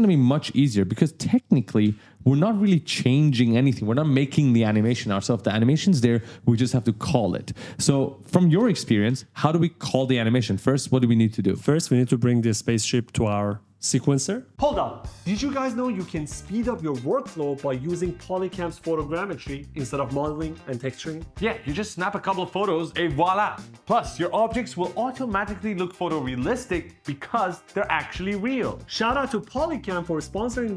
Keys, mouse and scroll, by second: 0.6 click, 1.8 h, 11.9-12.9 typing, 12.0 right click.